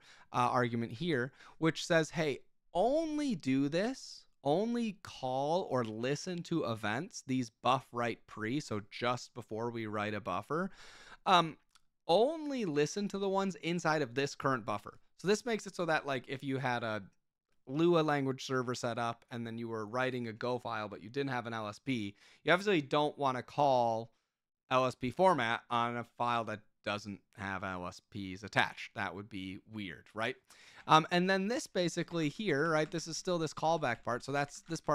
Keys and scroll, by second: 30.8 Return, 31.6-34.9 typing.